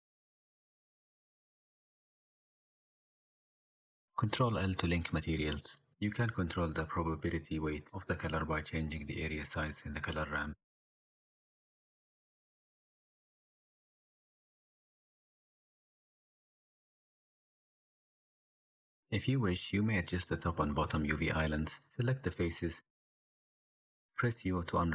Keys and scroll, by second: 0.3 x, 1.7 x, 4.3 ctrl+l, 18.5 n, 20.6 ctrl+KP_Add, 22.3 3.